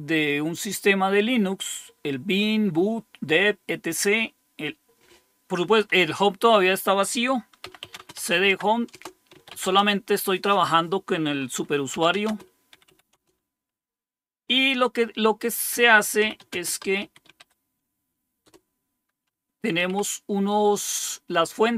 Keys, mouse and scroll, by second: 7.3-9.8 typing, 11.6-13.4 typing, 15.9-17.9 typing, 18.4 Return, 19.5-20.3 typing.